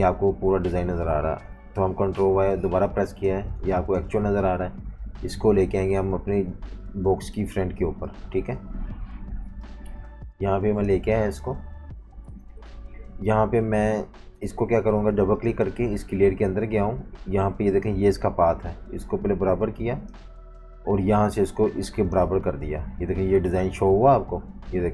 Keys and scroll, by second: 2.1 super+y, 2.9-3.7 typing, 10.0-11.6 typing, 12.3 super+y, 12.5 super+y, 24.2 super+z.